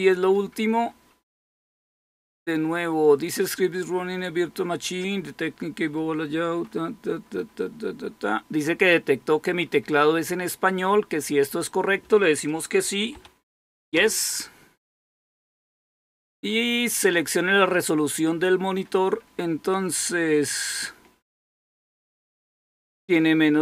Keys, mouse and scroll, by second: 13.8 Return, 14.0 typing.